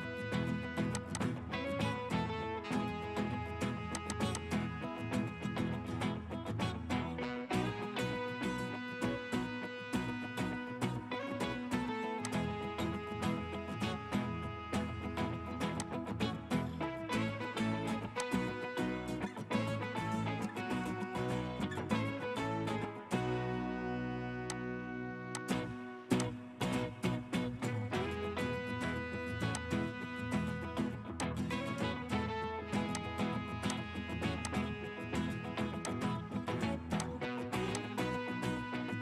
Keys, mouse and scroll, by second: 4.1 double click, 7.4 typing, 9.1 typing, 10.2-10.6 typing, 26.6 middle click, 26.9-29.0 scroll up 1.